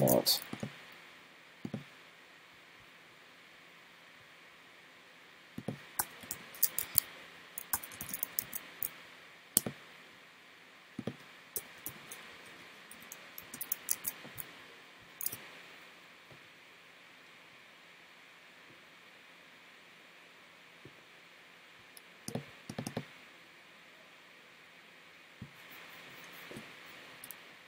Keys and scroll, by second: 0.0 super+s, 8.5 super+s, 14.0 super+s.